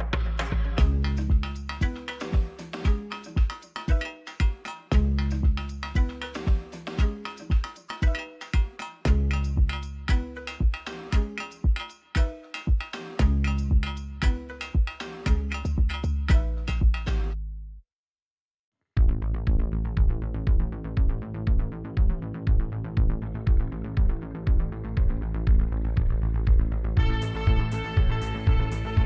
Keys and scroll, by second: 0.3 3, 0.5 0, 1.0 Return, 4.0 ctrl+r, 4.7 1, 4.9 5, 5.4 Return, 7.5 ctrl+r, 8.1 Return, 9.7 a, 10.0 s, 10.2 z, 12.5 Tab, 27.5 2, 27.8 Return.